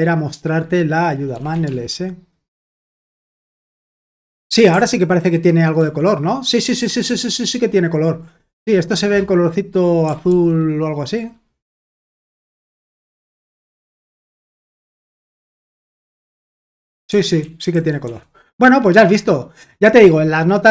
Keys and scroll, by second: 1.0-3.7 typing, 5.7 ctrl+d, 6.8 ctrl+d, 10.2 ctrl+d, 11.8 ctrl+d, 15.5-17.7 typing.